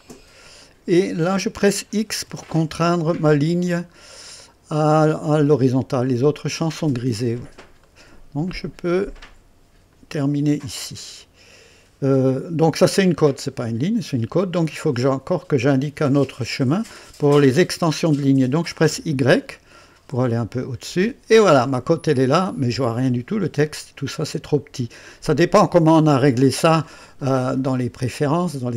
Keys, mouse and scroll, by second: 0.0 right click, 2.2 x, 4.0-4.5 scroll up 1, 4.8 right click, 7.1-7.4 scroll up 1, 7.8 right click, 8.4 typing, 9.9 click, 12.9 scroll down 1, 13.7-15.0 right drag, 18.9 y, 20.5 click, 21.7-23.6 right drag, 28.2 click.